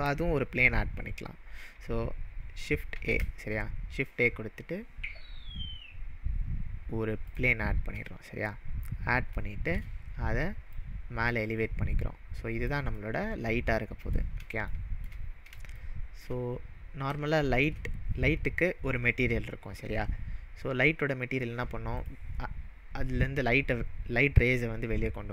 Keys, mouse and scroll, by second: 2.9 shift+a, 7.2 click, 8.0-8.5 middle drag, 8.8-9.4 scroll up 2, 9.4-9.9 shift+middle drag, 10.8-12.5 click, 13.0-14.1 middle drag, 15.2-15.5 scroll up 3, 15.9-16.3 shift+middle drag, 16.5-17.1 scroll down 2, 17.4-17.9 shift+middle drag, 22.0 click.